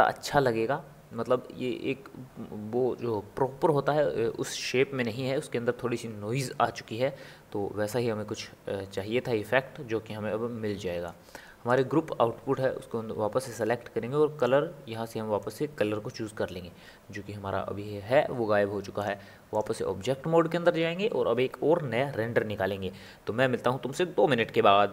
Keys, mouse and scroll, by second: 8.9-11.7 middle drag, 11.7 click, 13.5 click, 14.4-24.9 drag.